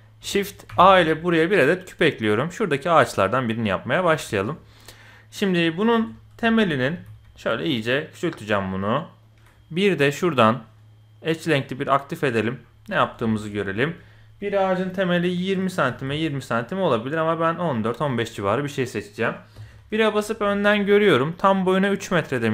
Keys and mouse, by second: 0.7 shift+a, 2.3-2.7 drag, 3.1 click, 4.2 shift+click, 6.0 Tab, 6.4 shift+click, 7.0 s, 10.5-12.2 drag, 13.2 shift+click, 15.9 s, 19.6 KP_1, 20.5 shift+click, 21.4 click.